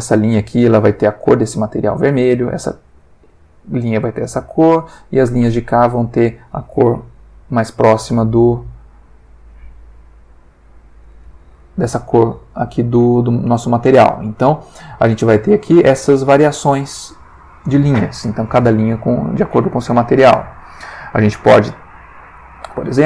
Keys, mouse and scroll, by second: 7.2 F12, 10.6 click, 20.6 click, 22.8 click.